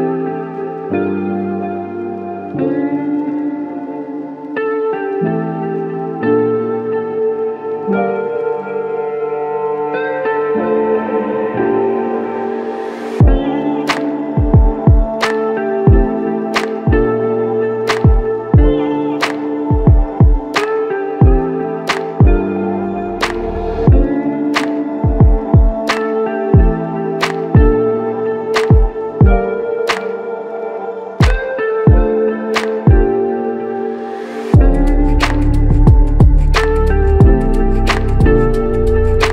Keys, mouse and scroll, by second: 0.8 alt+click, 8.1 ctrl+click, 14.2 ctrl+click, 18.3-19.3 scroll down 1, 21.3 r, 29.3 scroll down 1, 29.8-30.6 scroll up 1, 30.9 r, 31.5 ctrl+z, 31.9 ctrl+z, 32.4 ctrl+z, 32.9 r, 36.0 typing, 38.7-39.2 typing, 38.7 right click.